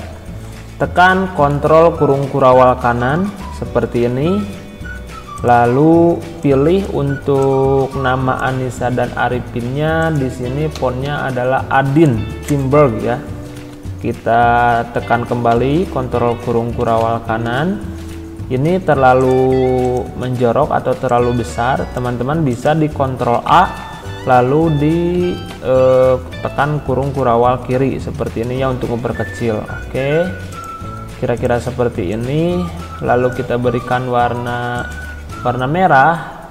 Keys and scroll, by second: 1.5 ctrl+], 10.7 a, 11.0 d, 12.4 Return, 13.7 ctrl+], 17.0 ctrl+[, 23.3 ctrl+a, 25.1 ctrl+[, 28.1 ctrl+].